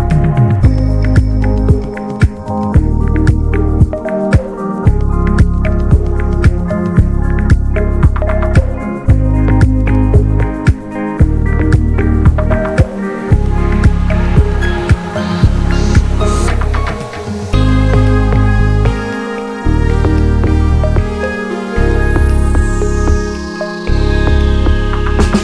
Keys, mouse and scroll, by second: 1.4 scroll down 2, 1.7 alt+z, 1.9 Tab, 2.5 Tab, 2.7-3.2 scroll up 1, 3.2 alt+z, 3.5 click, 4.6 click, 6.4 ctrl+click, 7.3-8.4 ctrl+drag, 8.4-9.0 scroll up 1, 9.0 click, 10.1-10.4 scroll down 1, 10.5 Tab, 10.6 middle drag, 10.8 drag, 11.0 scroll down 1, 11.2-11.5 middle drag, 11.5 click, 11.7 ctrl+a, 12.0 drag, 12.3-14.4 middle drag, 15.2 ctrl+s, 15.5 alt+middle click, 16.1 ctrl+s, 16.2 click, 16.4-16.9 shift+middle drag, 16.9 ctrl+s, 17.2-17.7 shift+middle drag, 17.7 ctrl+s, 18.0-18.4 shift+middle drag, 18.4 shift+a, 19.9 alt+middle click, 20.4 s, 22.5 shift+middle click, 22.6-23.2 shift+scroll up 1, 23.2 click, 24.7 alt+middle click, 25.0 ctrl+a.